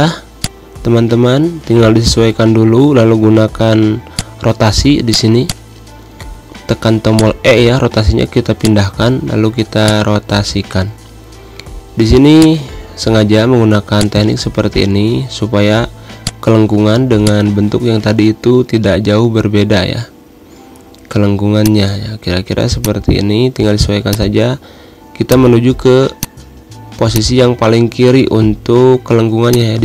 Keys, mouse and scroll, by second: 1.3 Up, 3.0 e, 3.7 scroll down 1, 4.1 z, 4.3 click, 5.4 space, 5.6 click, 5.8 space, 6.3 e, 7.3-8.5 drag, 8.5 space, 8.7 click, 8.9 space, 9.9-13.9 drag, 13.9 space, 14.2 click, 14.3 space, 15.6 click, 15.8 space, 16.4 click, 17.0 v, 17.4-18.9 drag, 18.9 Up, 21.7 space, 21.8 click, 21.9 space, 23.0 click, 24.2 space, 24.3 click, 24.4 space, 25.5 click, 25.7 space, 26.4 click, 27.2 space, 27.3 click, 27.4 space, 28.4 ctrl+g, 29.7-29.8 drag.